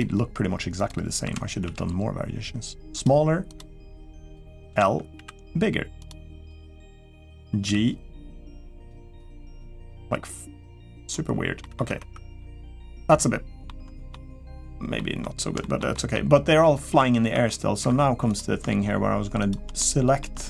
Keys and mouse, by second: 0.6 click, 1.0 l, 1.4 s, 4.0 click, 4.6 l, 4.9 s, 7.4 g, 9.3 click, 9.6 g, 11.4 middle click, 11.6 Tab, 12.2-13.4 middle drag, 13.7 shift+middle drag, 14.7 middle click, 15.4 shift+middle drag, 15.7 middle click, 17.2 Tab, 17.8 3, 18.1 click, 19.2 shift+click, 19.6 middle click.